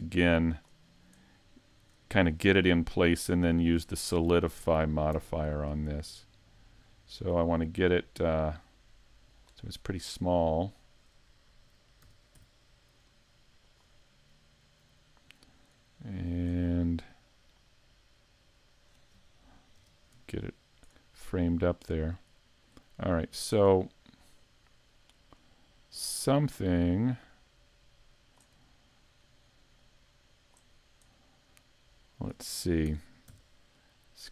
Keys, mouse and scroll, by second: 0.9-1.4 scroll up 2, 1.4 scroll up 1, 1.7 shift+middle click, 2.4 shift+middle click, 4.2 middle click, 5.1 s, 9.4 click, 9.6-10.1 scroll up 3, 10.1 middle click, 12.0 s, 17.6-18.2 scroll down 1, 18.2 middle click, 19.8 KP_Decimal, 20.5 scroll down 4, 20.9 middle click, 22.6 click, 23.7 middle click, 25.9 click, 28.7 middle click, 29.8 click, 31.1 middle click, 32.9 s.